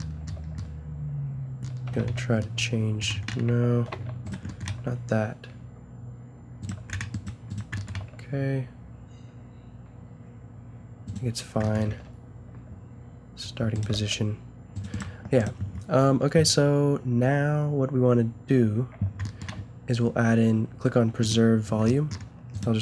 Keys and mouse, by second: 2.0 alt+s, 3.7 ctrl+z, 4.7 s, 7.9 g, 11.8 g, 13.9 g, 22.5 middle click.